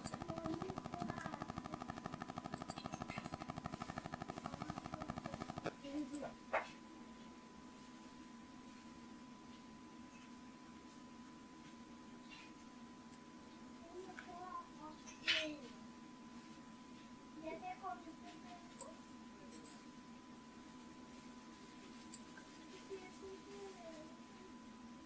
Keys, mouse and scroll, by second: 0.0-3.6 drag, 7.4-25.0 drag.